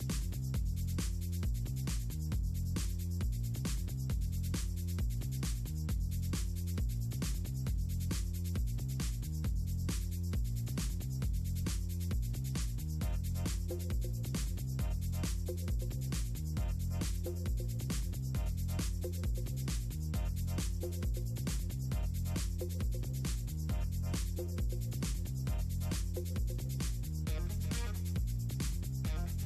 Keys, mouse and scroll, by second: 2.2 click, 3.5 middle click, 3.7 ctrl+scroll down 2, 5.4 click, 6.8 click, 7.2 click, 7.7 click, 9.4-9.9 scroll down 2, 9.9-10.3 scroll up 2, 10.7 click, 11.5 click, 12.9 click, 13.9 scroll down 2, 16.3 click, 17.0 ctrl+scroll up 2, 17.4 middle click, 17.7 middle click, 17.8 middle click, 18.1 middle click, 22.2 click, 22.5 middle click, 23.1 middle click, 23.7 middle click, 24.3 middle click, 24.4 click, 24.9 click, 25.5 click, 25.9 click, 26.5 click, 26.7 middle click, 27.0 middle click, 27.4 middle click, 28.6 click, 28.8 middle click, 29.0 middle click, 29.1 click.